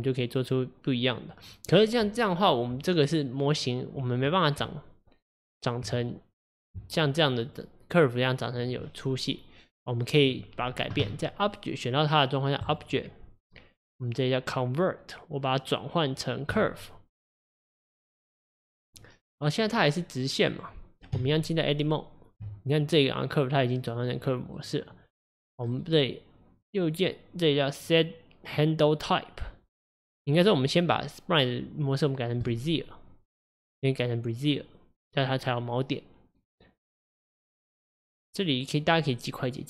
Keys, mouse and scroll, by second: 4.6 Tab, 7.5 click, 10.2 click, 12.7-15.7 drag, 19.7-20.6 drag, 21.2 Tab, 24.6 click, 25.7 right click, 39.4-39.6 drag.